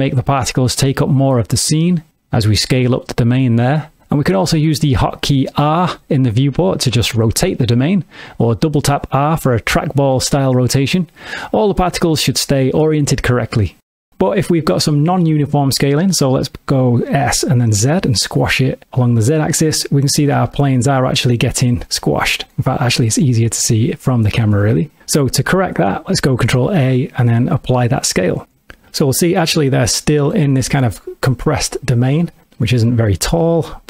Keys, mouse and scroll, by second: 0.4 click, 9.2 r, 9.4 r, 14.0 right click, 17.2 s, 19.4 click, 19.8 middle click, 20.6 ctrl+middle click, 22.0 middle click, 23.0 `, 24.8 ctrl+middle click, 26.6 ctrl+a, 29.0 middle click, 33.4 `.